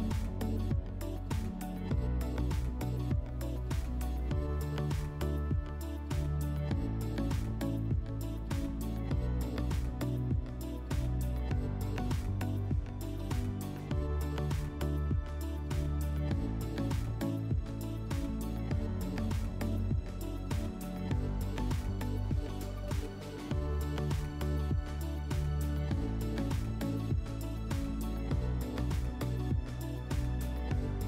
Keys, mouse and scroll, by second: 1.1 alt+w, 2.4 alt+w, 3.8 q, 4.8 alt+middle click, 5.5 middle click, 6.9 F4, 10.4-11.9 drag.